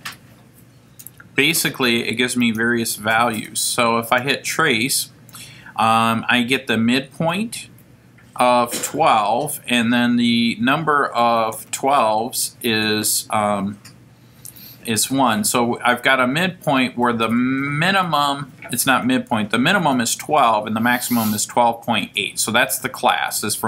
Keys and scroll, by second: 4.0 F4.